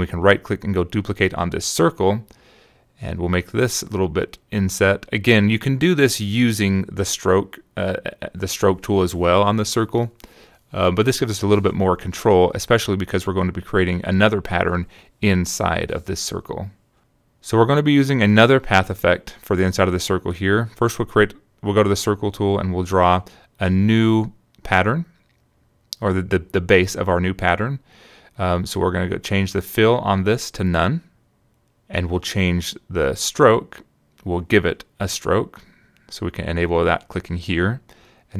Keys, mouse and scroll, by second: 0.4 shift+click, 1.0 click, 1.0 right click, 1.4 click, 1.9 right click, 2.5 click, 3.5 click, 4.5-6.0 shift+drag, 6.4 click, 7.1 click, 8.6 click, 10.7 click, 12.4 click, 19.6 click, 21.1-23.7 drag, 26.3 click, 27.8 click, 34.0 click, 37.2 click.